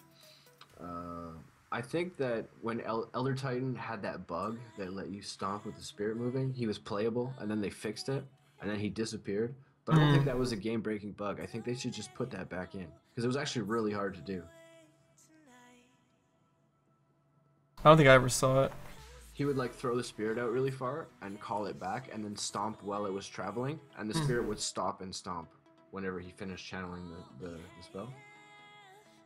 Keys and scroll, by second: 0.4 ctrl+z.